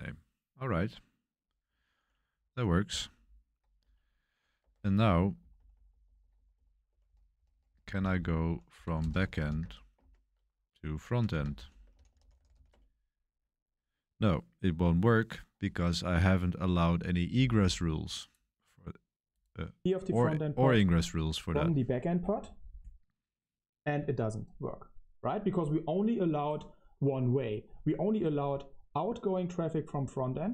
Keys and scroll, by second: 4.5-13.1 typing.